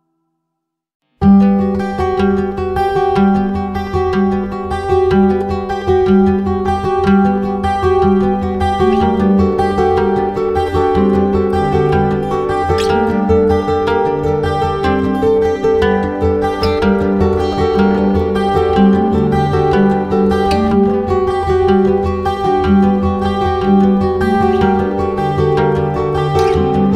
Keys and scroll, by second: 2.1 Return, 15.7 ctrl+z, 17.5 ctrl+z.